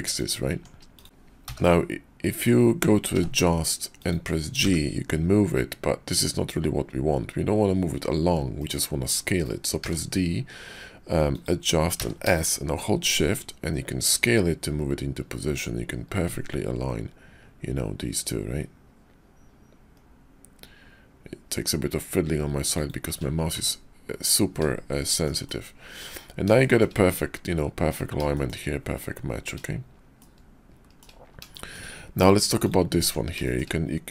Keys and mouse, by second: 0.5 Tab, 0.9 click, 1.4 middle click, 1.4 g, 2.4-4.8 middle drag, 3.1 d, 7.1-12.3 drag, 9.8 d, 23.2 click, 23.6 Tab, 24.6 click, 25.1 shift+click, 25.5-26.0 drag, 26.6 shift+click, 28.3 shift+drag, 30.2-31.0 shift+middle drag, 31.5 shift+middle drag, 33.0 Tab, 33.4 shift+middle click.